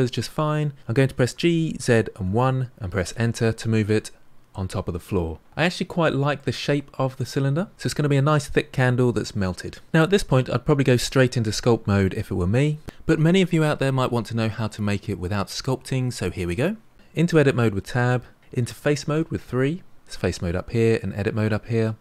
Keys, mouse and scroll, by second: 1.3 g, 3.5-7.7 middle drag, 16.9 Tab, 17.8 middle click, 18.6 3.